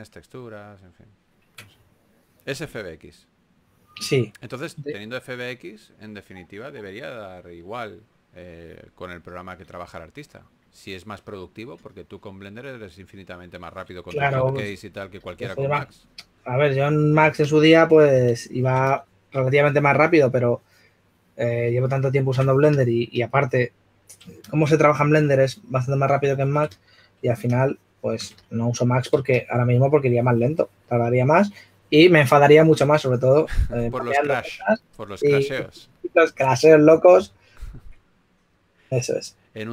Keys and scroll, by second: 4.7 s, 11.5 s, 36.4-38.4 typing.